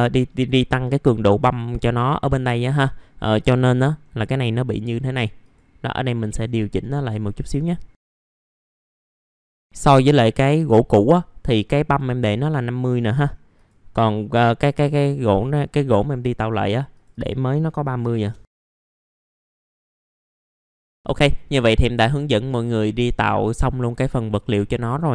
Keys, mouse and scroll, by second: 5.4 click, 8.2 click, 8.7 m, 8.8 middle click, 8.9 scroll down 1, 9.0 middle click, 10.2 click, 12.5 middle click, 13.1 scroll up 1, 13.5 click, 15.6 middle click, 16.9 click, 18.0 KP_5, 18.4 middle click, 18.8 click, 18.8-20.4 scroll down 1, 20.4 click, 20.4 scroll up 1, 20.5-21.9 scroll down 1, 23.3 scroll up 1.